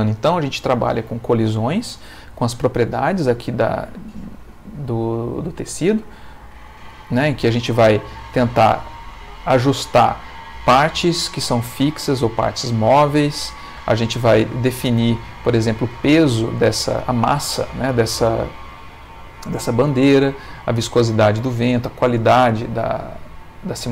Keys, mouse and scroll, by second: 5.9 click, 7.5 middle click, 8.4 middle click, 9.2 middle click, 12.8 middle click, 14.3 middle click, 14.8 middle click, 15.5 middle click, 16.2 middle click, 17.0 middle click, 22.6 middle click.